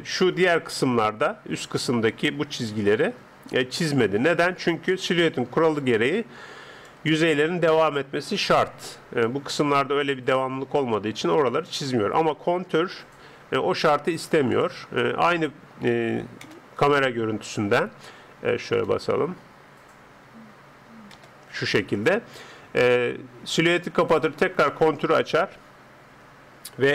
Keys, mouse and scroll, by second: 0.8 Tab, 2.8-11.9 d, 3.5 click, 5.7 click, 7.7 click, 10.1 click, 13.3 n, 14.5-16.3 drag, 15.0 n, 16.5 KP_0, 17.5-19.1 middle drag, 21.1 KP_0, 24.1-26.6 drag.